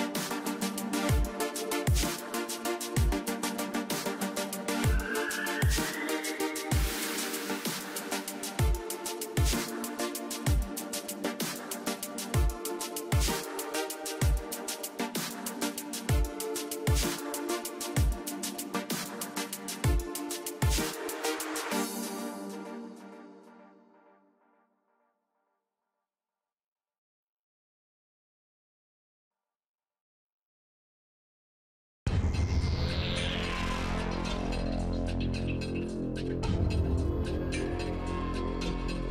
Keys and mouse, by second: 0.1 r, 3.0 ctrl+z, 3.4 ctrl+z, 4.1 x, 6.0 ctrl+s, 7.7-9.2 drag, 14.0 ctrl+s, 16.3-18.5 drag, 17.2 e, 20.3-22.6 drag, 21.0 e, 22.6 e, 24.7-25.9 drag, 24.7 a, 26.9 x, 27.9 ctrl+s, 31.4-33.0 drag, 31.5 e, 33.0-34.7 middle drag, 33.7 KP_1, 34.7 click, 37.1 KP_3, 37.9 KP_1.